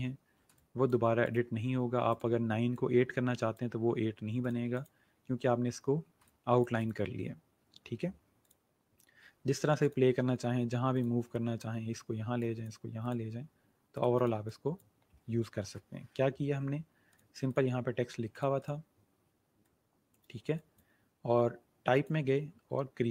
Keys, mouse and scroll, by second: 0.4 space, 0.5 click, 5.1-5.9 alt+scroll down 1, 5.9 scroll down 1, 6.1 click.